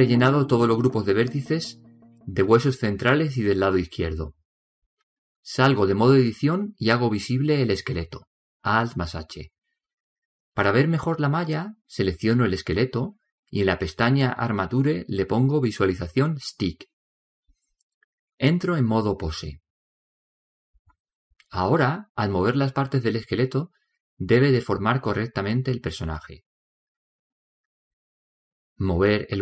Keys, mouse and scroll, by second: 5.6-7.6 drag, 8.9 alt+h, 12.0 right click, 13.5-15.5 middle drag, 16.7-20.5 drag, 20.4-24.1 middle drag, 23.6 right click, 24.2 click.